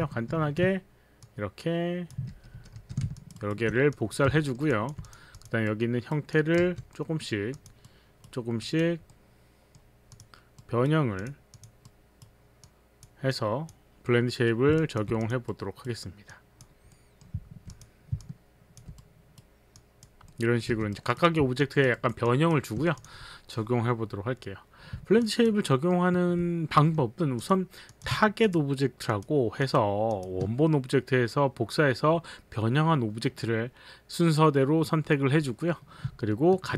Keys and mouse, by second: 0.3 shift+d, 2.3 shift+d, 2.5 shift+d, 2.7 shift+d, 3.2 alt+click, 3.4 alt+right click, 3.9 click, 4.3 click, 4.4 alt+middle click, 4.7 alt+click, 5.4 alt+click, 5.7 right click, 6.3 click, 6.7 click, 6.7 w, 6.9 middle click, 7.8 click, 7.9 right click, 8.6 click, 9.1 middle click, 10.2 click, 10.6 right click, 11.2 click, 11.6 click, 11.8 right click, 12.8 click, 13.3 click, 14.1 middle click, 14.1 click, 14.8 alt+click, 15.5 right click, 16.3 click, 17.0 middle click, 17.7 click, 17.7 middle click, 18.3 alt+click, 19.0 right click, 19.8 click, 19.8 right click, 20.2 middle click, 20.7 middle click, 20.7 w, 20.9 right click, 21.4 alt+w, 21.4 right click, 21.7 alt+click, 22.0 alt+right click, 22.6 alt+click, 22.6 alt+right click, 25.3 alt+click, 25.7 alt+middle click, 27.3 click, 27.9 click, 28.4 shift+click, 29.1 shift+click, 29.4 shift+click, 29.6 shift+click.